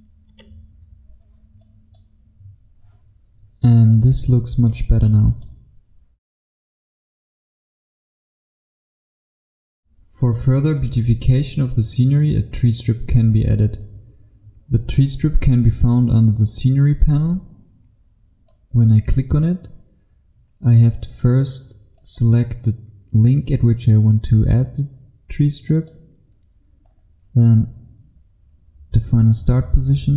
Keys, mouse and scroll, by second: 0.3 Return, 1.6 click, 6.6-8.6 scroll down 1, 9.8 F1, 18.6 click, 20.7-22.0 scroll up 1, 22.0 click, 26.8-30.1 scroll down 1.